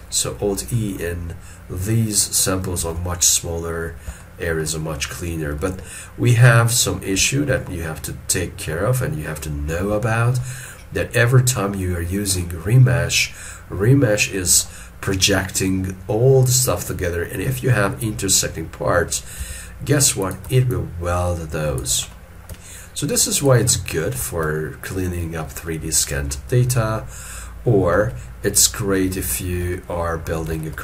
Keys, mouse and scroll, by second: 0.2 scroll up 1, 2.9 alt+e, 3.8 scroll down 1, 4.3 shift+middle click, 6.9-7.3 scroll down 1, 7.3 shift+middle click, 10.0 scroll down 1, 10.1 shift+middle click, 10.9 scroll down 1, 16.8 scroll down 1, 19.5 f, 20.8 shift+click, 22.2 middle click, 23.3 shift+click, 23.8 middle click, 25.7 alt+middle click, 26.6 middle click, 29.4 shift+middle click, 29.8 shift+middle click, 30.7 ctrl+middle click.